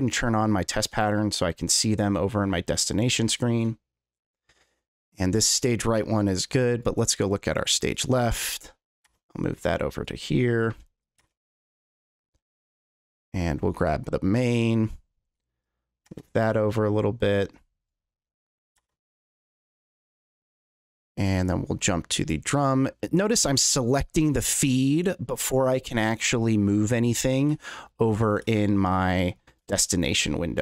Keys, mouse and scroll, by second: 0.0 click, 2.7 click, 5.7 click, 6.7 click, 7.9 click, 8.9-10.0 shift+drag, 10.4 click, 11.0 shift+click, 12.9 click, 13.8 click, 14.5 click, 15.6-16.0 drag, 16.7 click, 18.4 click, 19.3 click, 21.4 click, 22.1 click, 24.3 click, 27.2 click, 28.1 click, 29.0 click, 29.9 click.